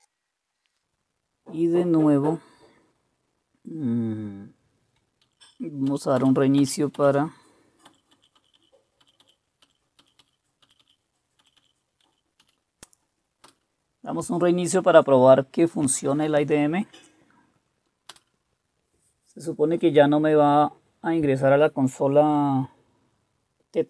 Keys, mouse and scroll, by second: 5.2 Up, 5.4 Up, 5.9 Up, 6.2 Up, 6.6 Up, 7.0-7.9 Up, 8.1 Up, 8.4 Up, 8.6 Up, 9.0 Up, 9.6 Up, 10.0 Up, 10.2 Up, 10.6 Up, 10.8 Up, 11.4 Up, 11.6 Up, 12.1 Up, 12.4 Down, 13.4 Return, 18.1 Return.